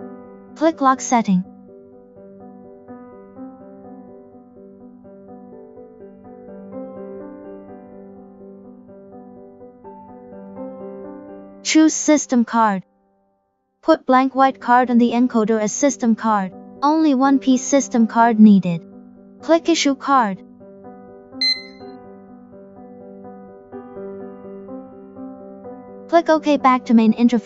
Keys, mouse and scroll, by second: 2.7 click, 9.5 click, 13.7 click, 18.9 click, 20.3 click, 22.6 click, 25.5 click.